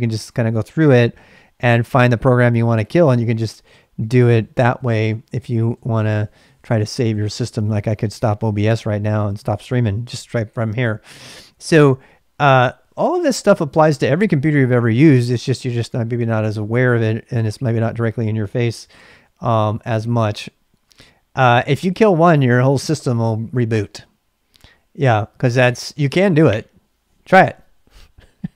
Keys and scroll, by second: 0.9 Down, 1.1 Down, 1.4 Down, 1.5 Down, 1.9 Down, 2.0 Down, 2.4 Down, 2.5 Down, 2.7 Down, 3.1 Up, 3.2 Up, 3.6 Up, 3.8 Up, 4.2 Up, 4.4 Up, 4.9 Up, 5.1 Up, 5.7 Up, 5.9 Up, 6.4 Up, 6.7 Up, 8.0 Down, 8.0 Up, 8.2 Down, 9.1 Up, 9.4-10.4 Up, 11.9 q, 19.6 ctrl+a, 19.7 ctrl+a.